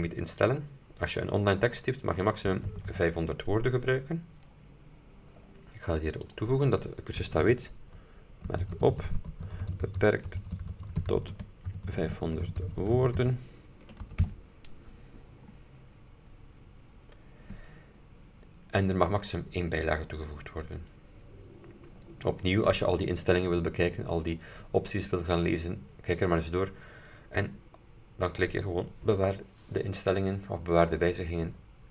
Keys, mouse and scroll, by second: 0.5 click, 2.6 KP_5, 2.7 KP_0, 4.6-5.6 scroll up 4, 6.3 click, 7.3-14.3 typing, 15.5-16.6 scroll down 4, 17.3-17.6 scroll down 2, 24.3-24.7 scroll down 2, 25.2-26.4 scroll down 2, 28.4 click.